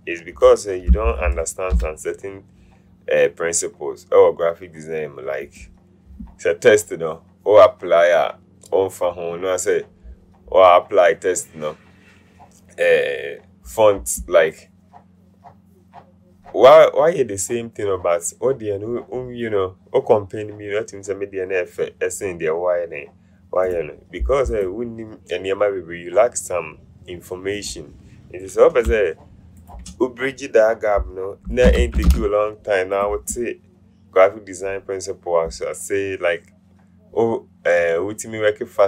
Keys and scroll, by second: 0.9-2.3 typing, 31.6 Down, 31.9 Down, 32.2 Down.